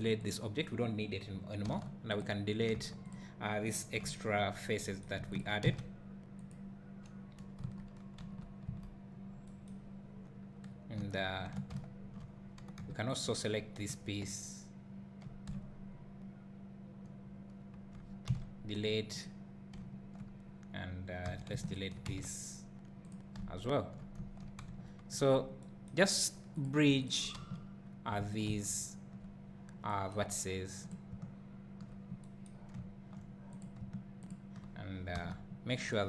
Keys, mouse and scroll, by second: 0.0 x, 0.3 click, 1.7 Tab, 2.2 click, 2.8 3, 3.1 click, 4.0 `, 5.4 shift+click, 6.5 x, 8.2 KP_3, 8.7 KP_1, 11.0 Tab, 11.7 `, 13.2 click, 15.5 `, 19.2 x, 21.7 alt+click, 23.1 x, 24.7 2, 25.3 scroll up 1, 26.6 click, 27.1 shift+click, 27.4 f, 28.4 click, 30.9 click, 32.8 `, 33.6 click, 34.3 shift+click, 35.2 f.